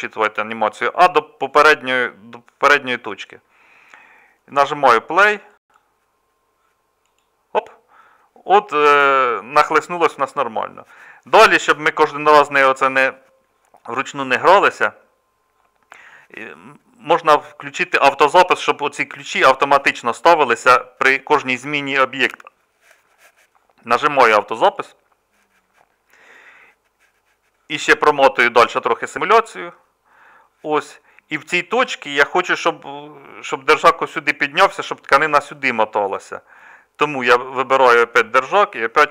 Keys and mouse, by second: 3.6-39.1 drag.